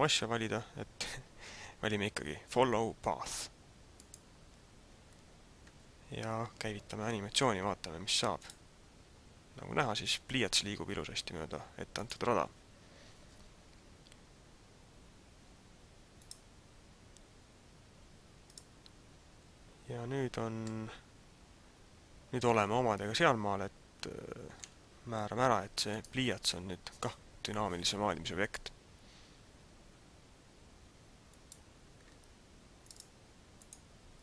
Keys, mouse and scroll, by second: 8.3 click, 11.9 click, 16.3 click, 20.7 middle click, 25.8 right click, 31.2 click, 32.7 click, 32.9 click, 33.6 click.